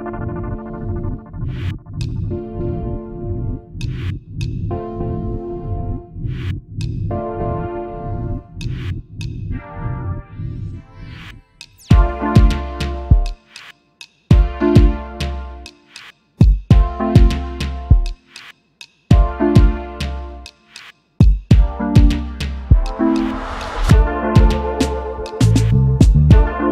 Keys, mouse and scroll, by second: 1.7 shift+click, 8.3-8.7 alt+scroll down 1, 10.1 Right, 10.9 Right, 12.2 alt+scroll down 1, 13.2 space, 13.3 double click, 13.9 alt+scroll down 1, 14.7-15.0 alt+scroll up 1, 15.3 double click, 24.9 space, 25.0 double click, 25.7 alt+scroll up 1.